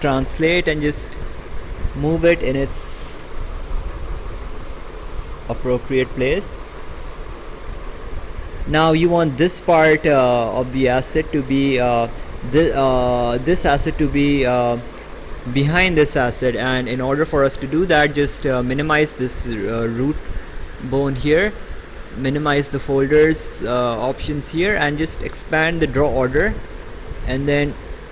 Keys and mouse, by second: 1.4 click, 4.0 click, 5.6 click, 12.3 click, 15.5 click, 18.9 click, 22.3 click, 24.5 click, 26.1 click.